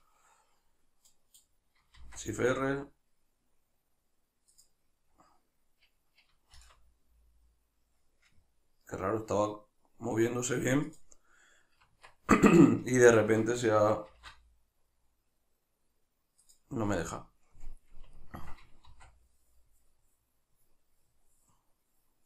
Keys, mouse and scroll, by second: 1.1-4.6 middle drag, 1.4-1.8 scroll down 1, 1.9 shift+r, 4.6 right click, 5.1-6.3 scroll up 1, 6.6 shift+r, 11.0 right click, 11.8 Tab, 14.1 shift+r, 16.5 right click, 18.2-22.2 ctrl+middle drag, 18.9 shift+r.